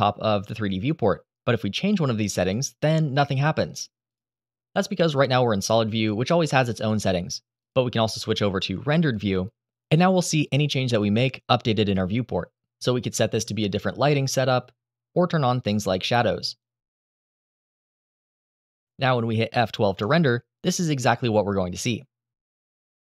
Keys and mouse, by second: 2.1 click, 2.6 click, 2.9 click, 3.4 click, 3.8 click, 6.6 click, 8.7 click, 10.4 click, 13.7 click, 15.8 click, 16.7 shift+a, 18.1 s, 19.5 click, 19.7 g, 19.8 z, 20.2 KP_1, 20.4 KP_Enter, 22.3 F12.